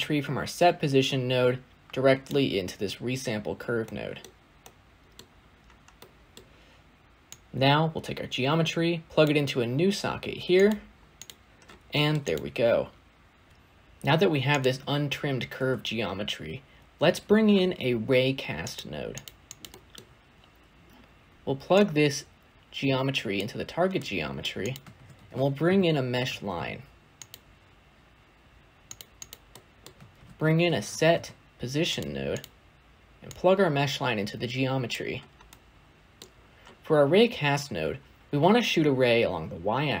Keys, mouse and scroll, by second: 9.1 click, 13.5 x, 23.3 click, 27.2 shift+a, 38.2-38.8 scroll up 4, 38.8-40.0 scroll up 1.